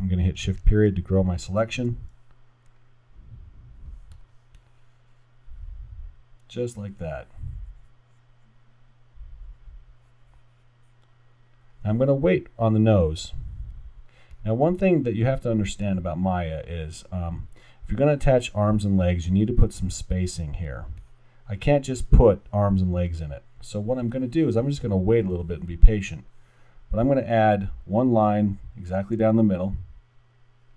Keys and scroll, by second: 0.6 shift+..